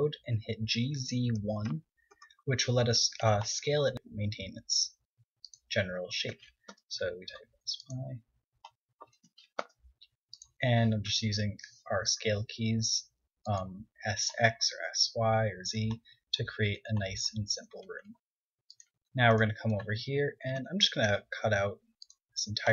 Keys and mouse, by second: 0.2 g, 5.9 s, 7.5-9.4 drag, 8.2 s, 9.8-14.2 drag, 11.1 s, 13.0 s, 19.4 Tab, 21.2 click, 22.3 x.